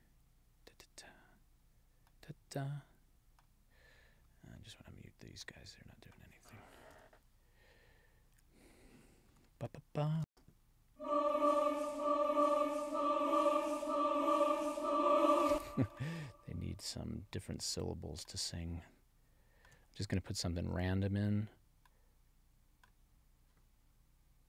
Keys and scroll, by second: 10.2 space, 15.4 space.